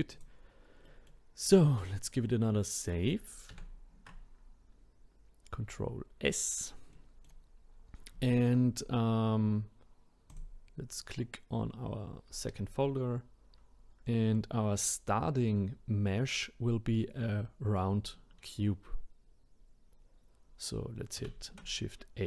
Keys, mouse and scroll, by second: 0.1 click, 0.8-3.5 middle drag, 3.5 ctrl+s, 6.9-7.7 middle drag, 7.7-8.2 scroll down 1, 8.2-10.3 shift+middle drag, 10.3-13.3 drag, 14.0-21.2 middle drag, 21.2 shift+a.